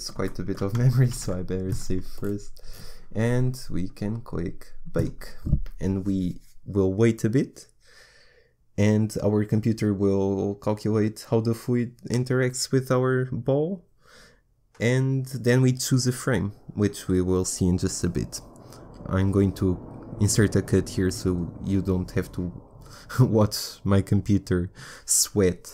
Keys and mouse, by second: 2.1 ctrl+s, 4.9-8.1 drag.